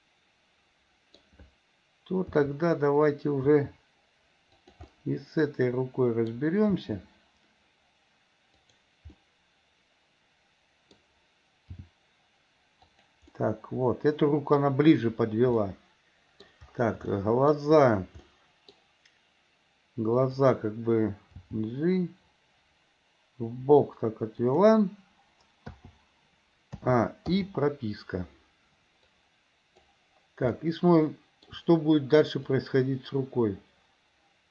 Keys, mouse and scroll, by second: 2.3 r, 3.6 r, 5.0-6.5 middle drag, 6.9 r, 9.3-11.2 middle drag, 11.9 g, 13.5-14.7 middle drag, 15.7 scroll up 1, 15.8 middle click, 17.2 shift+scroll up 1, 17.3-17.7 shift+middle drag, 18.4 middle click, 18.9-20.2 scroll down 1, 20.2 click, 21.6 g, 27.0 a, 27.5 i, 29.3-30.1 drag, 30.7-31.7 shift+middle drag, 32.7-34.5 drag.